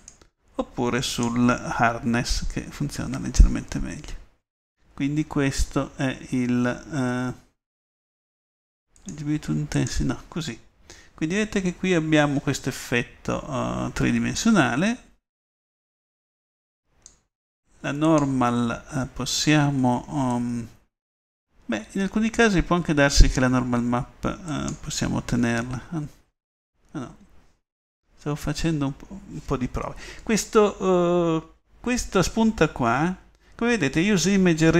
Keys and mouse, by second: 11.2-14.4 middle drag, 21.8-22.4 middle drag, 24.7 click, 25.6-27.2 middle drag.